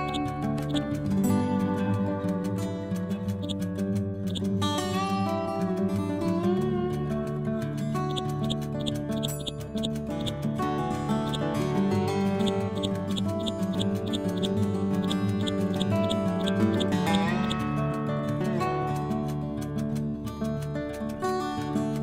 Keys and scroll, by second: 4.2 ctrl+g, 19.8 Page_Up.